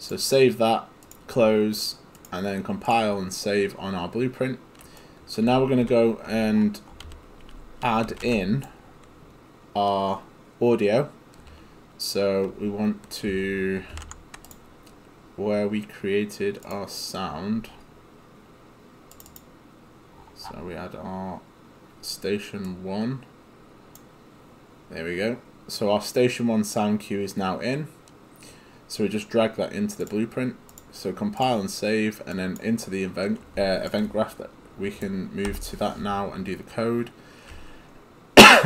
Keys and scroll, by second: 1.3 Delete, 5.8-8.8 typing, 13.9 ctrl+space, 35.7 Delete.